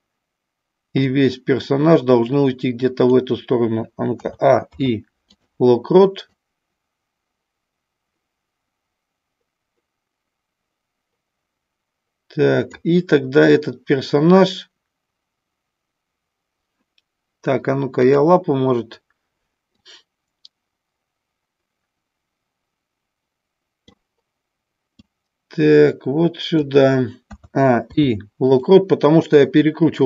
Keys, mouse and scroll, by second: 1.1-3.1 drag, 4.1 a, 4.7 i, 6.3-12.7 drag, 18.0 click, 19.7-23.8 drag, 25.0-26.6 drag, 27.2 a, 27.7 i.